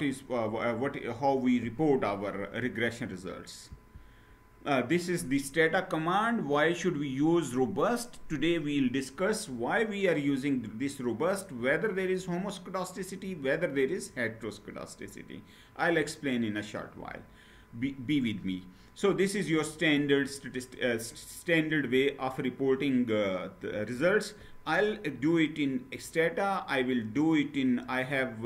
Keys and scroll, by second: 3.4 Down, 9.0 Down.